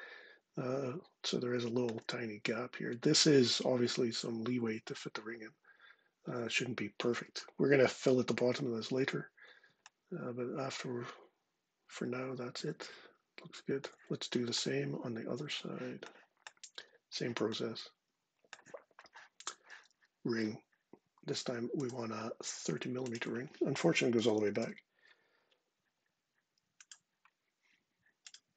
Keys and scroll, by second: 23.7-24.9 typing.